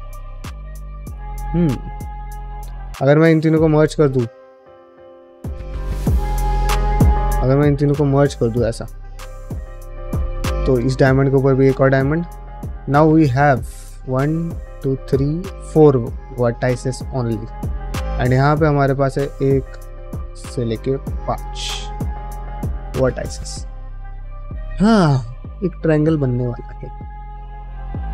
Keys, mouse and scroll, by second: 1.6 shift+middle click, 2.1 ctrl+middle click, 2.7 click, 3.1 shift+click, 3.4 shift+click, 4.4 click, 4.9 shift+click, 5.6 click, 6.2 shift+click, 7.6 m, 8.6 2, 8.8 click, 9.0 ctrl+x, 9.3 1, 9.6 click, 9.7 g, 10.3 click, 10.9 click, 10.9 g, 11.9 middle click, 12.8-13.9 drag, 14.0 middle click, 14.7 ctrl+click, 16.5-17.7 middle drag, 18.3 middle click, 18.9 click, 19.8 click, 20.5 ctrl+click, 20.9-23.8 middle drag, 25.3 middle click, 26.3 middle click, 26.7 middle click, 26.9 middle click, 27.3-28.1 middle drag.